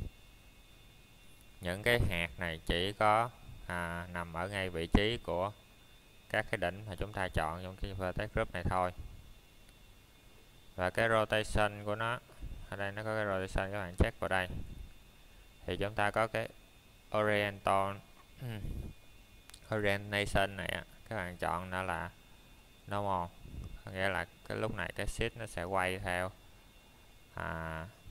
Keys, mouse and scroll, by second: 0.8-2.9 scroll down 1, 3.7 click, 6.6 click, 9.2-10.9 scroll down 1, 15.0 click, 18.2 middle click, 19.7-20.1 scroll up 1, 21.2 middle click, 21.6 scroll down 1, 22.1 middle click, 22.5 scroll up 1, 22.8 middle click, 23.4-24.5 scroll up 1, 24.5 middle click.